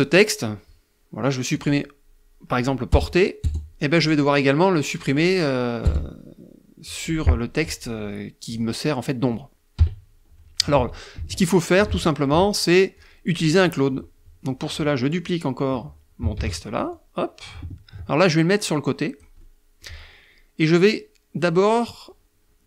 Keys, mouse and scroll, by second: 0.7 click, 2.0 BackSpace, 3.0 click, 4.1 click, 4.9 BackSpace, 7.5 click, 8.1 click, 8.8 KP_Subtract, 9.8 ctrl+z, 11.3 ctrl+z, 11.3 ctrl+click, 12.0 click, 15.4 ctrl+d, 16.0-18.4 ctrl+drag, 18.4 middle click, 22.5 click.